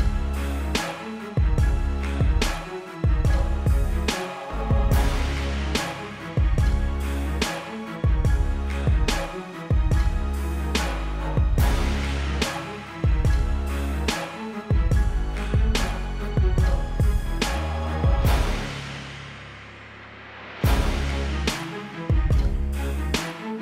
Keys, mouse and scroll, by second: 1.1 click, 2.3 click, 3.8 click, 5.9 click, 10.6 click, 11.3 alt+click, 11.9 click, 12.6 ctrl+alt+click, 13.6 ctrl+t, 13.8 alt+click, 14.5 Return, 14.9 click, 16.9-18.5 typing, 17.3 click, 17.8 click, 18.9 click, 21.5 click, 22.5 right click.